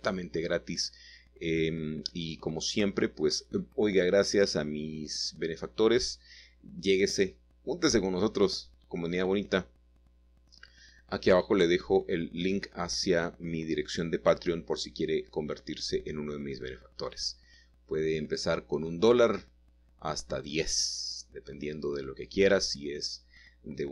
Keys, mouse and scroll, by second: 1.5 y, 3.1 click, 3.4 middle click, 4.2-4.9 scroll down 1, 5.1 shift+middle click, 6.0 shift+middle click, 6.7 middle click, 6.9 shift+middle click, 8.3 middle click, 9.2 7, 11.9-12.6 typing, 16.0 click, 17.5 typing, 19.6 click.